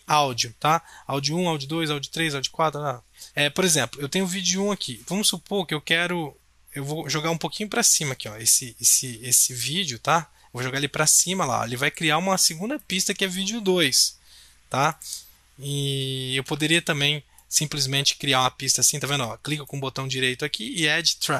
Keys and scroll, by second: 16.6 ctrl+z.